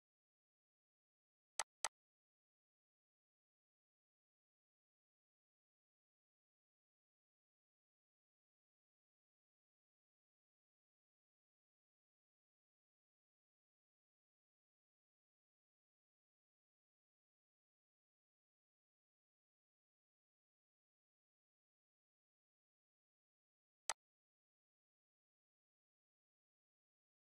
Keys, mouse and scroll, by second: 1.6 click, 7.4 click, 7.7 shift+b, 14.3-16.6 typing, 17.7-19.7 typing, 23.9 click.